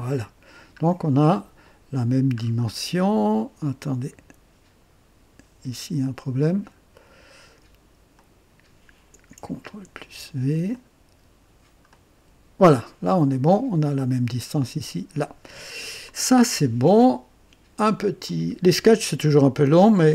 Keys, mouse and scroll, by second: 0.2-1.0 scroll down 2, 2.3-2.7 scroll up 1, 6.4 click, 8.1 click, 9.8 ctrl+v, 10.7 ctrl+click, 11.9 click, 13.0 scroll down 1, 18.2 click.